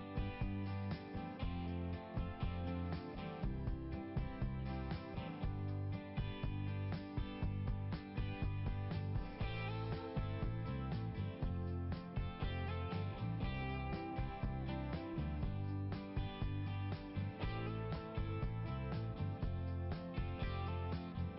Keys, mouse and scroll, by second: 2.8 right click, 3.0 right click, 4.2 right click, 5.3 click, 5.4 click, 11.1 click, 14.6 click, 14.7 click, 14.8 click, 14.9 click, 15.3 right click, 15.4 right click, 15.5 right click, 15.7 right click, 16.8 right click, 19.5 click.